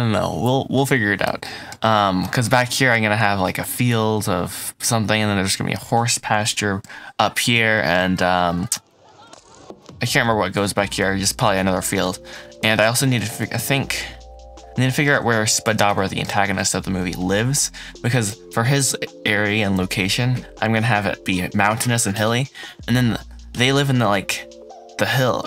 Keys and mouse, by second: 11.9 drag, 12.1 middle drag, 12.6 shift+middle drag, 13.1 middle click, 13.6-15.0 shift+middle drag, 15.8-25.4 shift+middle drag.